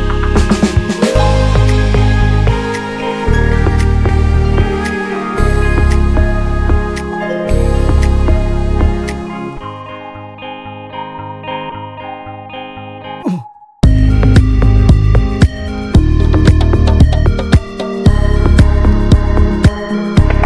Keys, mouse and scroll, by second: 2.2 scroll down 1, 2.5-3.0 middle drag, 3.0 drag, 3.2-4.8 middle drag, 4.8 ctrl+s, 5.1 drag, 5.4 shift+middle drag, 5.5 shift+scroll up 1, 5.7-7.3 middle drag, 7.3 ctrl+s, 7.8 scroll up 1, 8.1-8.5 shift+middle drag, 8.5 ctrl+s, 8.8 shift+a, 10.3 alt+middle click, 10.8 s, 12.0-13.8 drag, 14.0-14.9 scroll up 2, 14.3 shift+middle click, 14.9 s, 15.7 s, 17.3 click, 18.0 alt+middle click, 18.6 shift+middle click, 18.9 s.